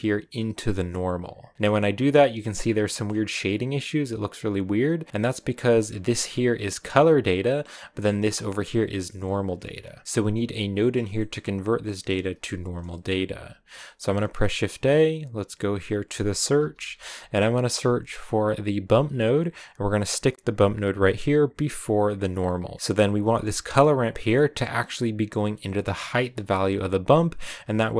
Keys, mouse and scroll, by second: 0.0 click, 2.0 middle click, 2.4 scroll up 5, 2.7-6.7 middle drag, 6.7-18.7 drag, 22.4 click, 22.7 middle click, 23.4-27.0 drag, 27.5 click.